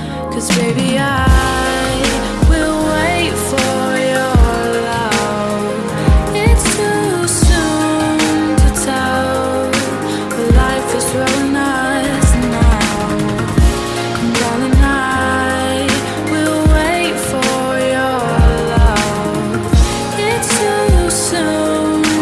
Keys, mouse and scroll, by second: 6.5 click, 7.5-9.5 typing, 9.6 Return, 10.9 click, 11.6-12.5 typing, 13.1 Return, 14.3-16.9 drag, 16.9 F10, 17.1 right click, 19.1-20.8 typing, 20.8-21.2 scroll up 1.